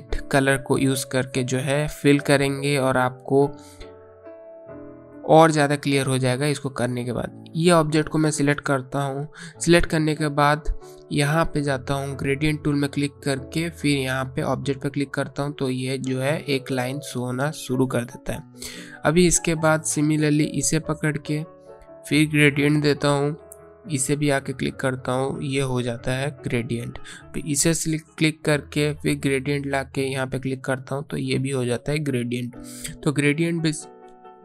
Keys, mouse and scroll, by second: 5.5 click, 8.2 click, 12.3 click, 18.2 click.